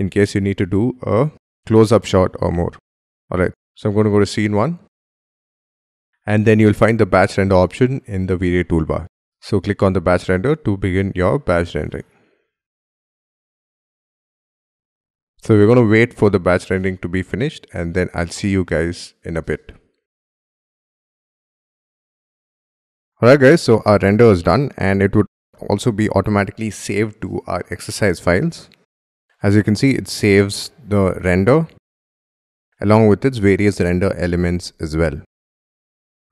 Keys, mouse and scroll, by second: 23.7-24.1 scroll up 1, 24.1-25.4 scroll down 1, 29.1 scroll down 5, 29.3-30.4 scroll up 2, 30.4-30.7 scroll up 1, 31.6 double click, 32.4 Right, 32.5 Right, 32.6 Right, 32.9 Right, 33.3 Right, 33.6 Right, 33.9 Right, 34.2 Right, 34.5 Right, 34.8 Right, 35.1-35.9 Right, 36.2 Escape.